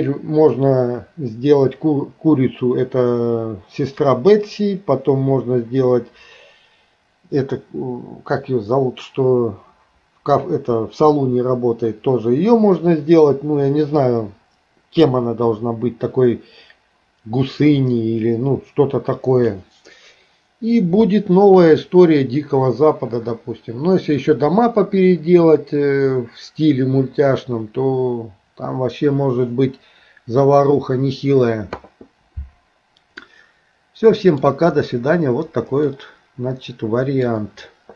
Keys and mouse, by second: 33.3-34.4 middle drag, 35.9-37.2 middle drag.